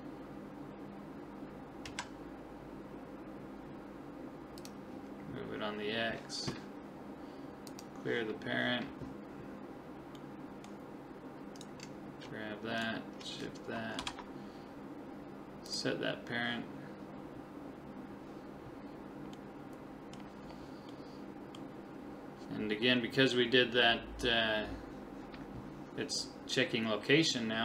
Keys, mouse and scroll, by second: 7.7 click, 10.2-11.6 middle drag, 11.6-14.7 right drag, 11.8 middle click, 14.0 ctrl+p, 19.4-22.7 middle drag.